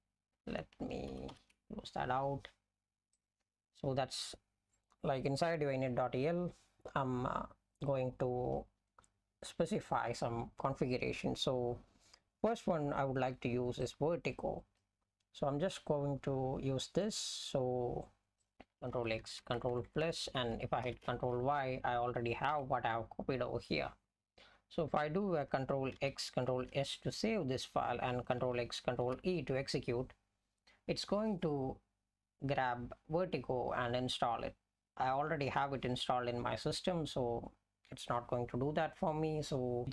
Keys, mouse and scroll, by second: 1.1 ctrl+g, 1.3 ctrl+g, 18.5 ctrl+g, 20.9 ctrl+y, 22.5 ), 26.5 ctrl+s, 29.2 ctrl+e.